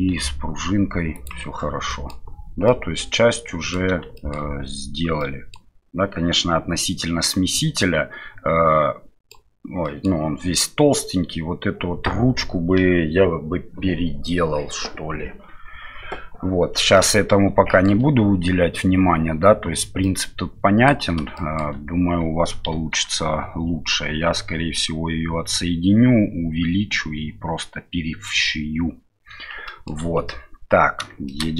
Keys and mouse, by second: 1.1 click, 1.9 middle drag, 2.6-3.7 middle drag, 4.1 shift+middle drag, 5.2-5.5 middle drag, 7.8-9.3 middle drag, 9.8 middle drag, 16.9-17.8 middle drag, 20.0-20.9 middle drag, 21.3 shift+middle drag, 22.7 KP_1, 29.6 shift+middle drag, 31.2 shift+middle drag.